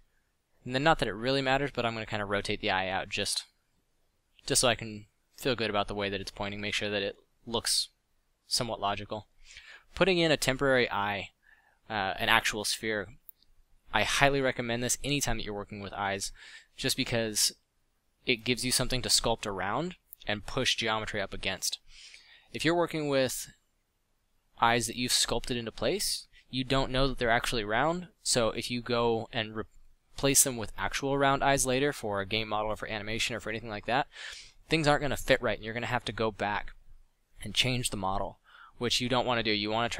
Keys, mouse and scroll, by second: 0.2 Tab, 1.6 r, 2.3 r, 4.6 middle click, 6.5 Tab, 10.4 drag, 19.4 g, 19.7 f, 20.2 d, 22.6 click, 24.7-25.1 middle drag, 25.2 middle click, 26.6 middle drag, 35.2 f.